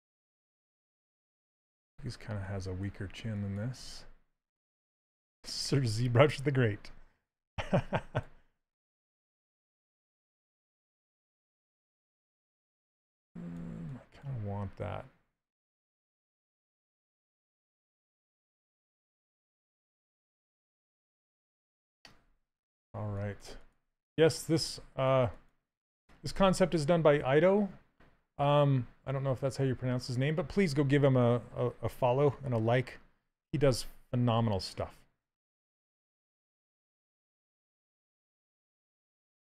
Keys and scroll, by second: 4.9 s, 16.1 s.